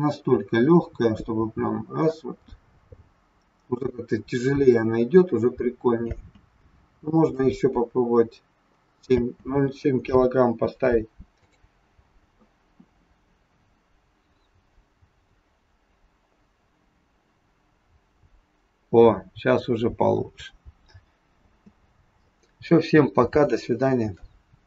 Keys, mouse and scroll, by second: 6.2 space, 7.3 click, 9.1 space, 11.5 click, 21.5 space.